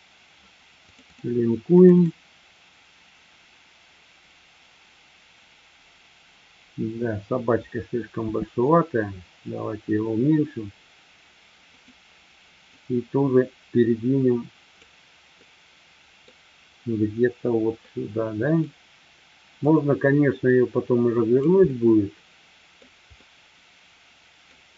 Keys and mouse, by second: 11.9 click, 12.6-14.9 drag, 15.4-16.4 middle drag, 17.9-18.7 middle drag, 19.7-21.4 drag, 21.7-22.7 middle drag, 23.2-24.5 middle drag.